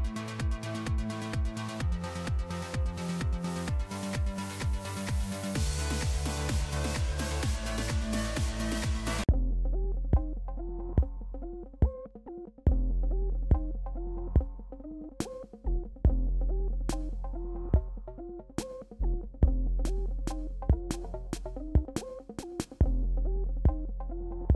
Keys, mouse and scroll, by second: 2.8 alt+scroll down 1, 5.1 click, 5.9 click, 7.8 click, 9.4 e, 10.3 alt+scroll up 1, 12.2 ], 12.4 ], 12.9 ], 13.2 click, 16.2 alt+scroll down 1, 17.1 alt+scroll up 1, 17.8 click, 20.7 alt+scroll down 1, 21.1 click, 21.6 alt+scroll down 1, 22.8 click, 23.6 alt+scroll down 1.